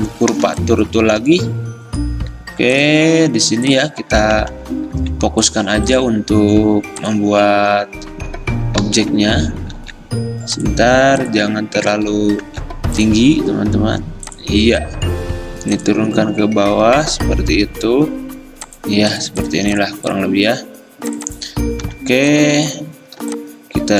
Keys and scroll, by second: 0.0 `, 4.6 ctrl+z, 5.0 ctrl+z, 8.9 ctrl+z, 9.2 ctrl+z, 12.0 ctrl+z, 21.9 v, 23.3 r.